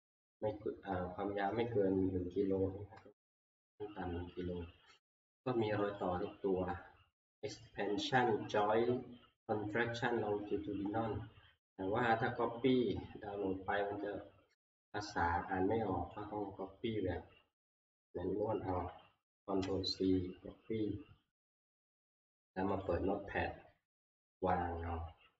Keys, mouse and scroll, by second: 6.0 click, 17.9 click, 19.6 ctrl+c, 22.8 click, 24.0 ctrl+v.